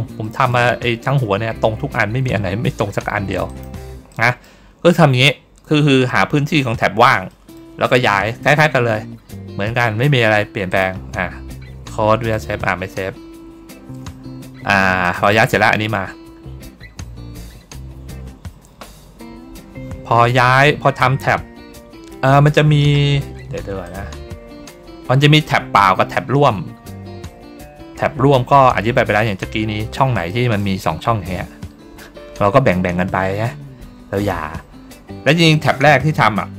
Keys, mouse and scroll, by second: 0.1 middle click, 0.7 ctrl+scroll down 1, 1.8 ctrl+middle click, 2.3 ctrl+middle click, 2.9 ctrl+middle click, 3.4 click, 4.0 middle click, 4.6 ctrl+scroll up 1, 7.2 middle click, 8.0 middle click, 10.6 click, 12.2 click, 14.9 click, 15.1 click, 23.7 click, 26.1 ctrl+middle click, 26.1-26.5 ctrl+scroll up 2, 26.5 ctrl+middle click, 26.9 ctrl+middle click, 26.9 ctrl+scroll down 1, 27.1 ctrl+middle click, 28.2 ctrl+middle click, 29.2 middle click, 30.2 middle click, 30.7 ctrl+middle click, 33.3 ctrl+middle click, 34.3 ctrl+middle click, 34.6 ctrl+middle click.